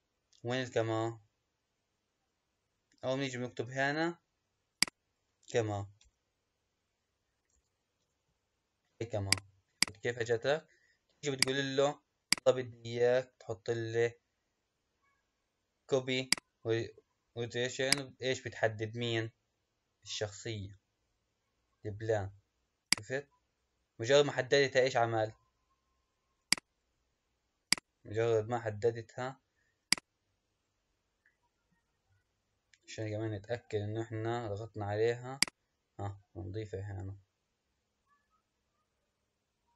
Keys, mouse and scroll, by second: 0.0-0.7 scroll down 1, 0.7-1.3 scroll down 1, 1.3-1.9 scroll up 1, 4.7-7.8 drag, 9.8 click, 11.4 click, 12.2-15.3 drag, 17.8 click, 26.4-29.5 drag, 30.8 scroll down 2, 32.0 scroll down 8, 33.1-33.8 scroll down 16, 35.4 click, 39.1-39.5 scroll up 3.